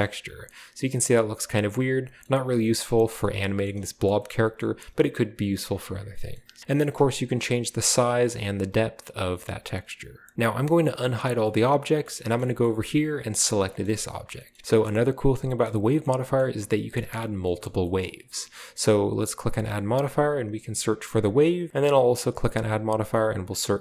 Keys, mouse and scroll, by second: 0.0-0.4 middle drag, 0.4-1.1 scroll down 1, 1.1-1.6 scroll up 1, 2.2-2.5 middle drag, 2.5-3.6 scroll up 1, 3.6-4.1 shift+middle drag, 4.2 shift+middle click, 4.5-5.5 middle drag, 5.5-6.6 drag, 6.1-6.6 middle drag, 6.6 space, 6.7 space, 7.6 click, 8.4 right click, 8.8-10.3 drag, 10.3 alt+h, 10.3 a, 10.8 shift+middle drag, 11.4 shift+middle click, 12.0 shift+middle click, 12.4 shift+middle drag, 12.6-13.1 shift+middle drag, 13.1-13.6 scroll up 1, 13.5-14.2 shift+right drag, 13.8-14.3 shift+middle drag, 14.2-14.6 shift+scroll up 1, 14.5 shift+middle click, 14.8 shift+middle click, 15.6 middle drag, 15.7-16.9 scroll up 1, 16.0 shift+middle click, 16.3-16.9 shift+middle drag, 17.1-17.4 shift+middle drag, 17.6 shift+middle click, 18.0-19.4 middle drag, 19.4 click, 19.8 typing, 21.2 click, 22.0 click, 22.4 typing.